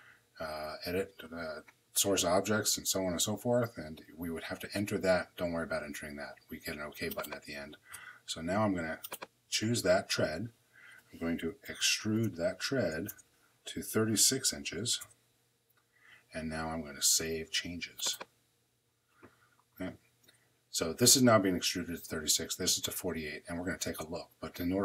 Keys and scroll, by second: 10.9-12.3 typing, 12.9 Return, 13.7 3, 14.0 6, 14.8 Return.